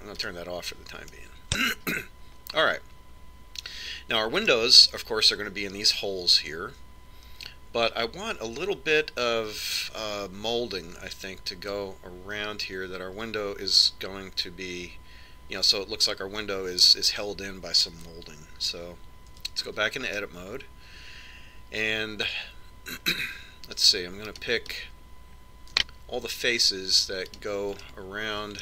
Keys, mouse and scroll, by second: 1.5 click, 3.2-4.4 middle drag, 20.7 Tab, 21.5 middle click, 22.1-23.6 middle drag, 25.7-27.5 right drag.